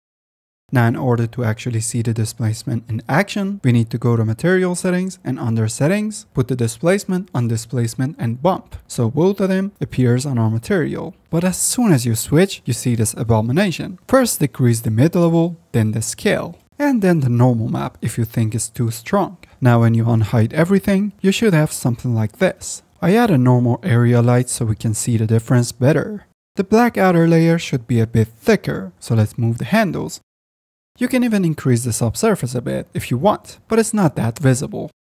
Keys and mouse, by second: 1.0 shift+middle drag, 1.4 shift+drag, 2.3-2.7 shift+drag, 3.1-3.4 shift+drag, 3.6 click, 4.9 click, 7.5-8.9 drag, 24.1 click, 25.6 click, 26.4 click, 26.6-27.1 middle drag, 27.6 click, 27.8 click, 28.1 click, 29.0 click, 30.7 middle click, 31.0 middle click, 31.1-32.7 middle drag, 32.7-35.0 right drag, 35.0 middle click.